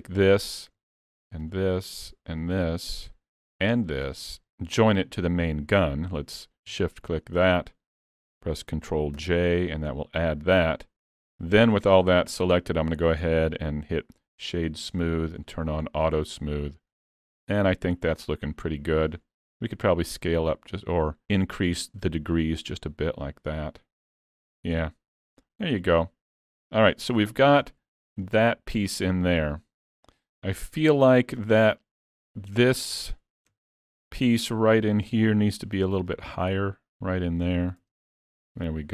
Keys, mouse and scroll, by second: 0.0 click, 0.4-1.5 scroll up 3, 1.5 shift+click, 2.4 click, 4.2-5.1 scroll down 1, 6.9 shift+click, 7.6 middle click, 9.2 ctrl+j, 12.3 click, 15.4 click, 16.7-18.4 scroll up 3, 16.9 middle click, 18.5-18.9 scroll up 1, 18.9-19.8 scroll down 1, 19.8 scroll down 2, 20.1 click, 24.8-25.2 scroll down 4, 25.2 alt+a, 25.5-26.5 scroll down 2, 25.9 middle click, 26.9-27.2 scroll up 4, 27.2 shift+middle click, 27.8 middle click, 30.2 middle click, 30.7-31.4 scroll up 5, 31.1 shift+middle click, 32.0 click, 33.6 Tab, 34.6 alt+a, 35.2 l, 36.1 click, 37.8 alt+a, 38.0 Tab, 38.3-38.9 scroll down 4, 38.6 middle click.